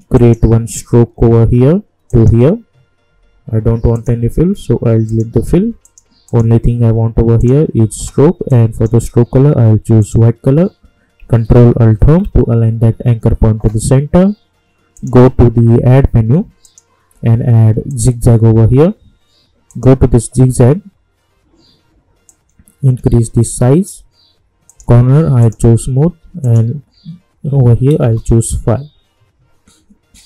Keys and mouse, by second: 0.1 click, 2.0-10.0 shift+drag, 12.0 ctrl+alt+Home, 14.9 click, 22.2-24.7 drag, 28.0 Return.